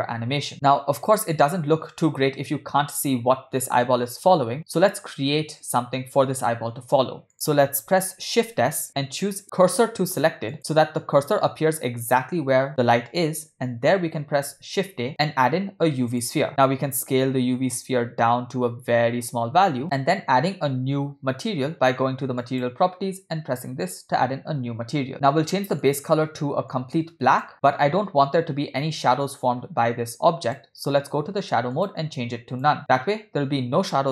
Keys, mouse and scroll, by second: 8.5 shift+s, 14.4 shift+a, 16.8 s, 22.4 click, 23.8 click, 25.7 click, 29.3-30.6 drag, 31.7-32.7 drag.